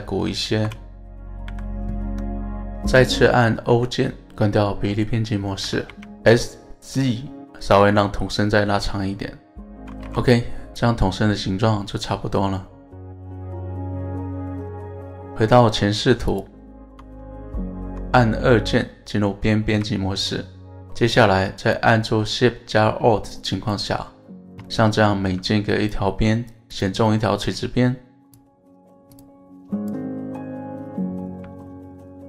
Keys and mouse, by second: 0.6 KP_1, 1.5 a, 2.1 s, 2.8 right click, 3.7 o, 5.9 z, 7.6 click, 8.0-9.4 middle drag, 10.0 KP_1, 10.3 Tab, 11.0-14.2 middle drag, 15.4 KP_1, 16.3 click, 16.7 Tab, 18.7 2, 20.1 alt+shift+click, 21.0 alt+shift+click, 22.0 middle click, 23.6 alt+shift+click, 24.7 middle click, 26.7 alt+shift+click, 27.1 middle click, 29.1 alt+shift+click, 29.8 alt+shift+click, 30.9 middle click.